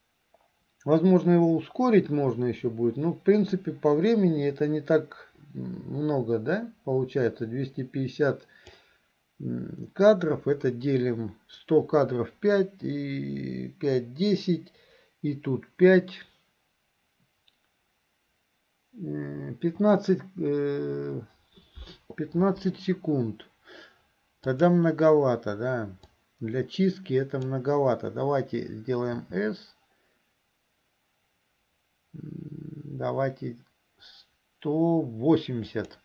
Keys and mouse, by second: 24.6 click, 26.4-27.5 drag.